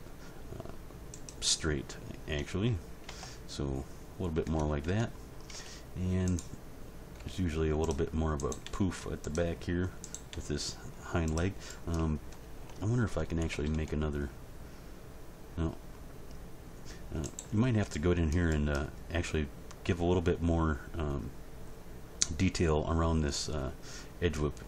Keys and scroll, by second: 3.0 Tab, 4.4 Tab, 7.2 g, 8.6 g, 10.3 g, 13.5 ctrl+r.